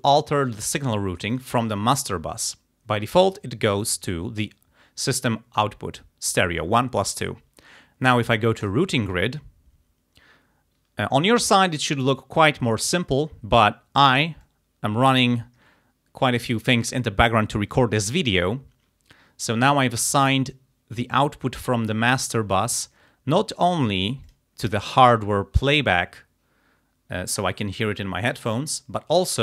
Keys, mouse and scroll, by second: 1.4 click, 3.3 click, 8.7 click, 14.5 click, 24.3 click.